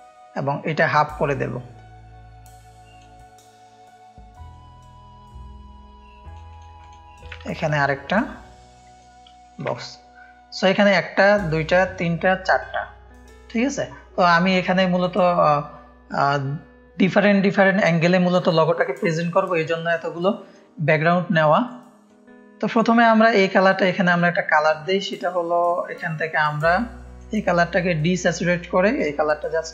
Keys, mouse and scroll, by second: 1.1-2.9 drag, 4.5-6.3 drag, 7.2-9.0 alt+drag, 9.4 click, 9.6 space, 9.7 click, 10.7 click, 11.3-12.7 drag, 12.7 space, 12.8 click, 13.4 click, 16.8 F1, 19.6 click, 19.6 space, 20.3 click, 21.5-24.2 drag, 25.7-27.1 drag, 29.6-29.7 drag.